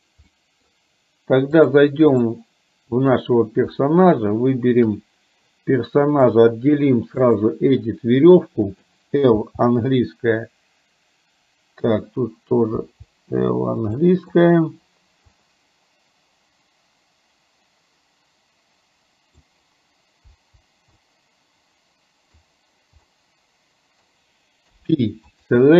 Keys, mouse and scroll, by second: 0.3 middle click, 1.6 click, 3.1 click, 6.5-7.5 drag, 8.8 click, 9.5 l, 13.0 l, 14.1 middle click, 15.5-19.5 middle drag, 20.5 l, 21.1-22.6 middle drag, 23.1 scroll up 1, 23.2 middle click, 24.1 scroll down 1, 24.7 p.